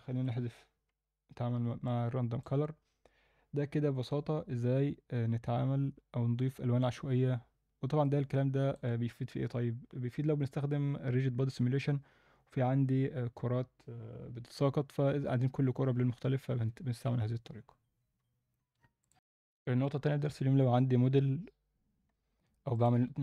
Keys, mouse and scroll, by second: 0.2 ctrl+x, 1.9 click, 6.8 click, 8.0-8.8 alt+middle drag, 22.7 click.